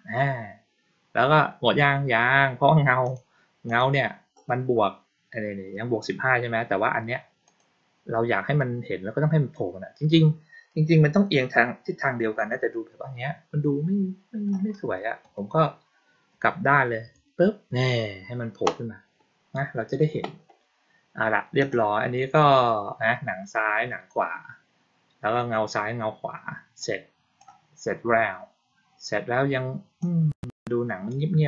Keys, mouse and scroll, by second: 3.0 click, 3.6 click, 7.4 click, 21.5 click, 26.7 click, 29.9 click.